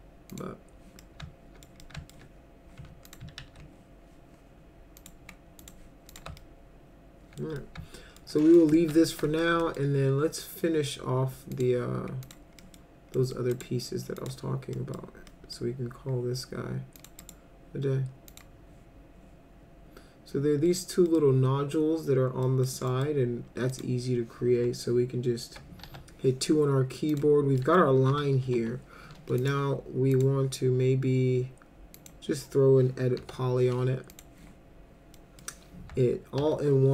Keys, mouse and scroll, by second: 0.3 click, 1.0 alt+middle click, 1.8 alt+middle click, 3.1 click, 3.4 ctrl+a, 5.0 click, 5.6 click, 6.1 click, 6.4-7.4 alt+middle drag, 7.6 alt+middle click, 8.4 middle drag, 8.8-9.1 alt+middle drag, 9.3 middle drag, 9.6 middle drag, 11.5 click, 12.2 click, 12.6 middle drag, 13.2 middle click, 13.5 right click, 14.2 click, 14.8 middle click, 15.3 middle click, 17.0 click, 17.2 right click, 18.3 click, 20.7 middle click, 21.1 middle click, 22.4 middle click, 22.9 middle click, 23.7 click, 25.8 2, 27.1 click, 27.6 middle drag, 28.1 F4, 28.4 F4, 29.4 click, 30.1 click, 32.0 click, 33.2 e, 34.1 click, 35.1 middle click, 36.4 alt+1.